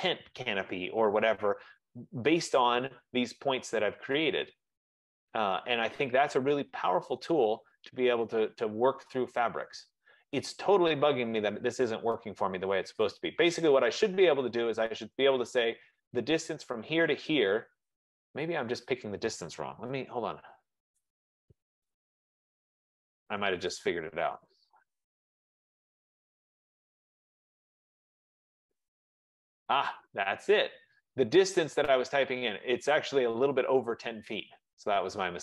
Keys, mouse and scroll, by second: 2.2-2.9 scroll, 3.8-4.3 scroll, 7.4 right click, 7.7-8.7 scroll, 12.9 middle click, 13.2-18.2 right drag, 20.1-20.6 typing, 21.0 Return, 22.4 Escape, 22.6 Escape, 22.7 Escape, 23.3-23.8 typing, 24.5 Return, 26.6 click, 28.4 click.